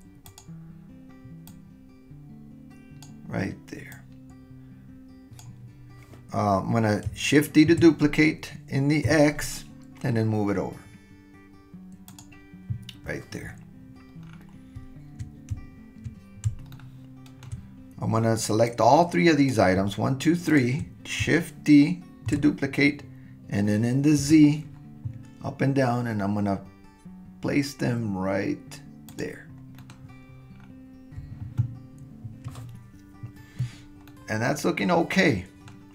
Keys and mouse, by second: 1.6 click, 3.9 click, 7.7 shift+d, 16.7-17.5 shift+middle drag, 18.7-19.7 drag, 20.4 shift+click, 22.3 shift+d, 29.8 middle click, 34.1-35.7 middle drag.